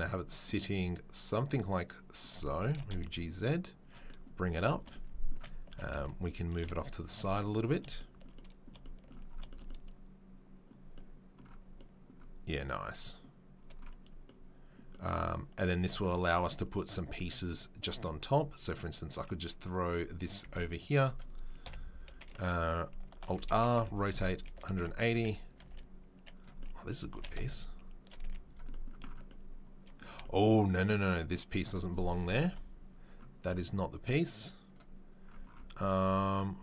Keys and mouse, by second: 2.6 g, 15.8 Tab, 17.9 click, 18.0 middle drag, 18.2-19.9 drag, 19.9-23.0 middle drag, 21.6 KP_7, 23.2 alt+r, 23.7 r, 25.1 g, 25.5 s, 28.2 z, 29.0-34.6 middle drag, 32.5 Delete, 34.6 click, 34.7-36.6 middle drag.